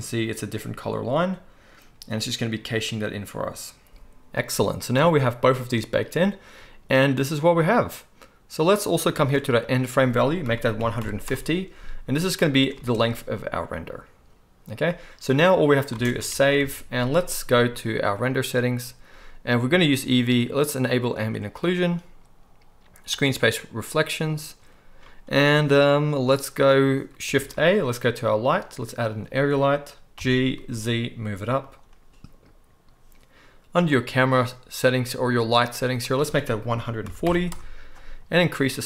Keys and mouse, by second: 5.0 space, 8.8-9.2 drag, 8.8-9.2 middle drag, 8.8-9.2 right drag, 9.2 space, 12.7 space, 13.9 click, 13.9 middle click, 13.9 right click, 15.9 space, 16.3 ctrl+s, 16.6 ctrl+s, 16.6 ctrl+middle click, 16.8-18.2 middle drag, 18.2-19.0 drag, 21.1 middle click, 23.1 middle click, 27.4 shift+a, 27.5-30.1 drag, 30.1 g, 30.4-33.2 drag, 36.0-38.8 middle drag.